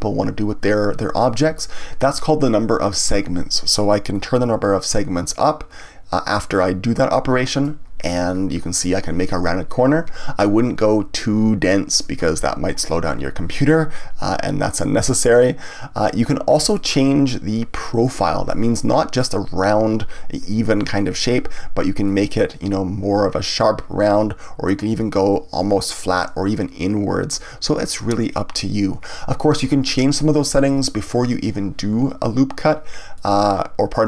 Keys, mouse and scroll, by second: 4.1-7.2 drag, 10.8-13.8 drag, 14.2-17.2 drag, 18.5-21.5 middle drag, 22.0-25.1 drag, 33.1-34.0 middle drag.